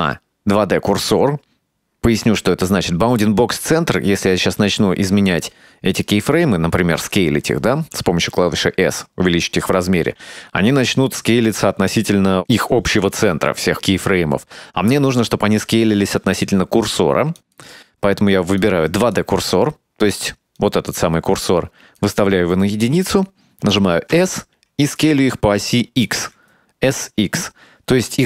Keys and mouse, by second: 8.9 s, 17.5-19.2 drag, 20.7-22.1 drag, 24.2 s.